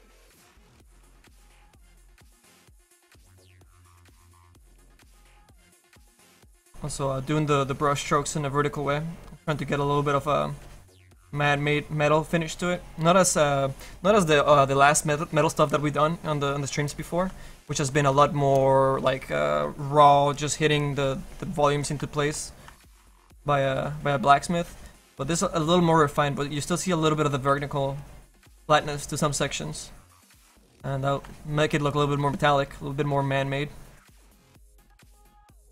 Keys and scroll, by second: 1.0 s, 27.6 s.